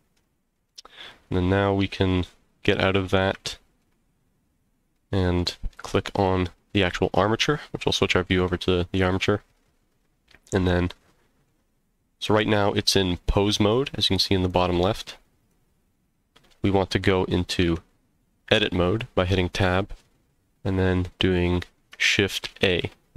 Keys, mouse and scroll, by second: 0.2 middle click, 1.0 click, 1.8 Tab, 3.4-3.8 shift+middle drag, 4.1 scroll down 1, 4.9 middle click, 6.1 click, 10.1-10.9 scroll down 2, 10.6-11.5 middle drag, 14.5 click, 17.6 Tab, 22.4 shift+a.